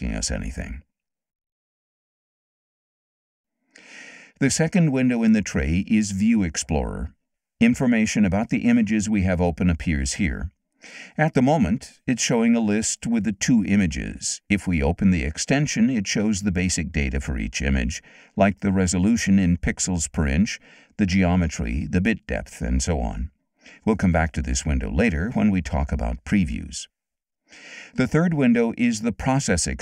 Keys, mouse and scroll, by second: 1.5 Return, 7.5 click, 8.7 click, 12.8 click, 15.3 click.